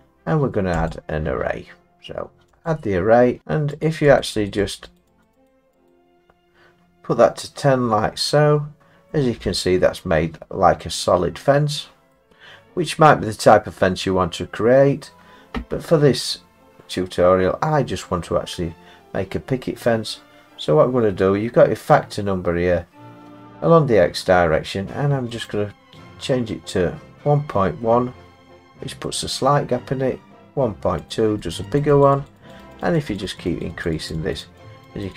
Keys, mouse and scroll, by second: 0.9 click, 2.7 click, 3.9 click, 4.2 click, 4.5 click, 4.7 click, 5.0 click, 5.2 click, 5.5 click, 5.9 click, 9.1 middle click, 12.1 middle click, 25.5 click, 29.0 middle click, 31.1 click, 31.5 click, 31.8 click, 32.0 click, 32.5 click, 32.7 click, 33.0 click, 33.2 click, 33.4 click, 33.8 click, 34.2 click, 34.3 click, 34.6 click, 35.0 click.